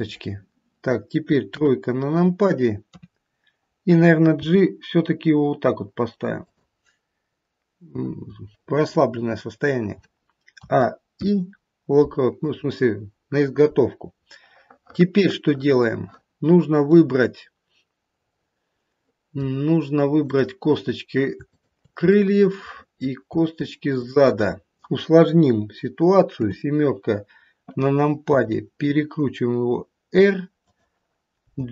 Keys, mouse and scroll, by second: 1.6 KP_1, 2.9 KP_3, 4.4 g, 10.5 a, 11.0 i, 14.3 middle click, 18.1 middle click, 19.1 middle click, 20.2 click, 21.4 shift+click, 22.2 middle click, 23.9 shift+click, 26.3 KP_7, 28.3 r.